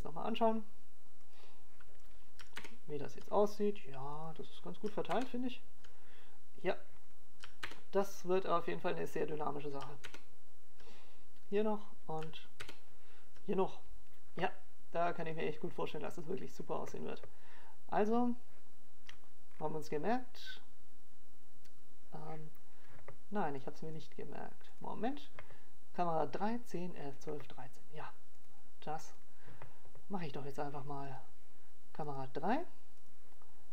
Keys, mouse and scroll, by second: 3.2 click, 4.8 KP_0, 6.9 click, 8.3 ctrl+KP_0, 9.9 click, 10.9 ctrl+KP_0, 12.3 click, 13.4 ctrl+KP_0, 14.8 click, 15.9 ctrl+KP_0, 17.3 click, 18.5 ctrl+KP_0, 21.0 click, 30.7 click.